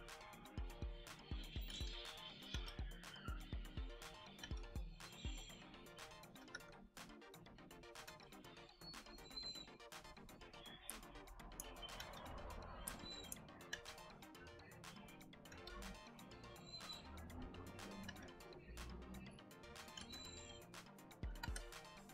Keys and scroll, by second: 1.6 g, 2.4 b, 4.3 b, 6.4 z, 7.9 e, 10.5 h, 10.8 space, 11.9 e, 12.8 space, 13.6 b, 15.4 e, 18.0 b, 19.9 g, 21.3 b.